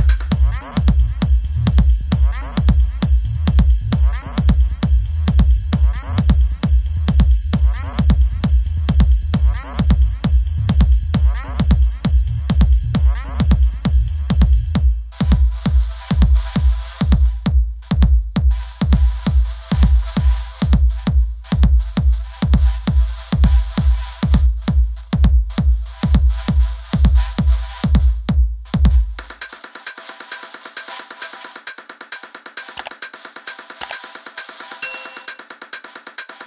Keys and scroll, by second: 0.7 shift+Right, 4.6 super+c, 4.9 super+f, 5.2 shift+Right, 9.4 Right, 13.6 shift+Left, 15.9 super+-.